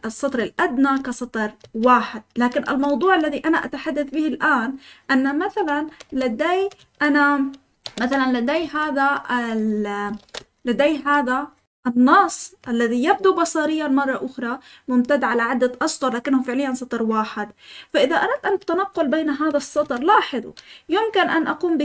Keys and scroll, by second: 0.0-0.9 typing, 2.3-4.2 typing, 6.0 f, 6.7 Escape, 7.8 v, 8.0 v, 8.5 Escape, 9.2-10.8 typing, 19.8 Escape.